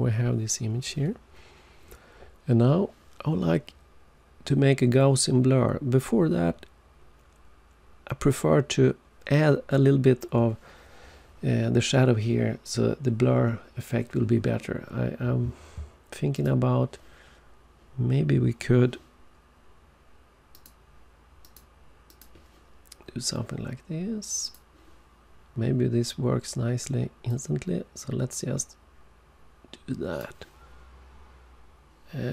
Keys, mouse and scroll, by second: 16.3 click, 20.4 click, 21.3 click, 22.0 click, 24.4 click, 27.2 click.